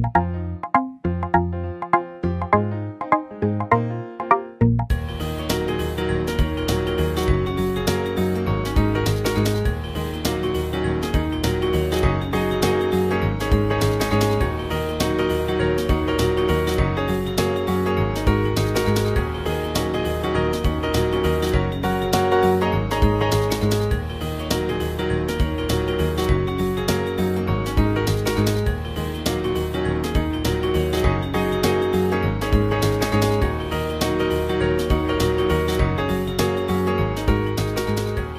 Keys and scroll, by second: 4.9-7.4 typing, 8.7 space.